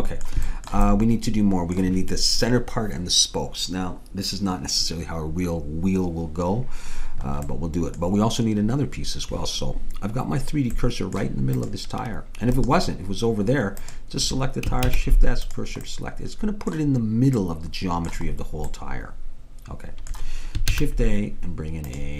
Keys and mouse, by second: 7.6-10.5 middle drag, 10.8 middle click, 11.6-13.4 drag, 12.6-14.4 right drag, 14.4 click, 14.9 shift+s, 20.7 shift+a.